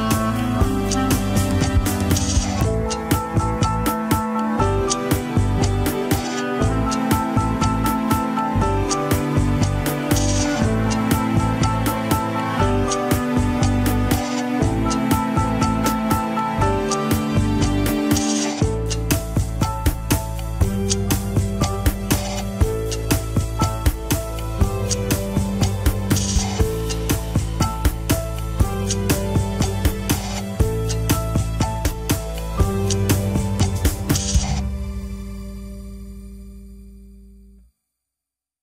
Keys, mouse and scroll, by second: 0.9 click, 1.4 click, 2.4 middle click, 3.2 click, 3.5 click, 4.0 click, 4.9-6.9 middle drag, 6.9 click, 7.4 click, 7.6 middle click, 8.3 click, 9.2 scroll down 4, 9.3 middle click, 9.8 KP_1, 10.0 Tab, 10.2-10.7 scroll up 3, 10.8 ctrl+s, 10.9 scroll down 3, 11.3-13.0 middle drag, 13.0 click, 13.2 scroll down 1, 13.4 Tab, 13.6 s, 14.3 Tab, 15.0 Tab, 15.8 click, 16.1 Tab, 16.2 scroll up 1, 16.4 middle click, 17.0 click, 17.4 Tab, 17.8 Tab, 18.0 click, 18.2 Tab, 18.4 s, 19.1 Tab, 19.3 click, 19.5-20.3 middle drag, 20.3 click, 20.5 Tab, 20.7 s, 21.1 KP_1, 21.3 scroll down 4, 21.9 Tab, 22.1 scroll down 1, 22.3-24.7 shift+middle drag, 24.9-25.5 scroll down 3, 24.9 KP_1, 25.6 ctrl+s, 25.8-27.9 middle drag, 27.9 drag, 28.2 Tab, 28.4 s, 28.9 Tab, 29.1-30.2 middle drag, 30.2 ctrl+s, 30.3 scroll up 4, 30.8 shift+middle drag, 30.9 scroll up 2, 31.3-31.8 shift+middle drag, 31.8 scroll up 1, 32.4 scroll up 1, 33.1-35.1 middle drag, 35.2 KP_1, 36.3 shift+click, 36.9 click, 38.5 click.